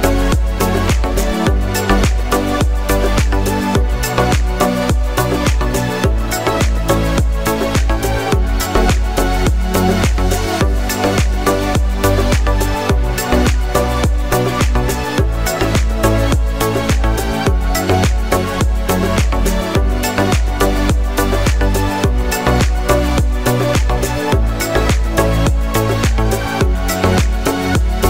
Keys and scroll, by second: 7.7 ctrl+v.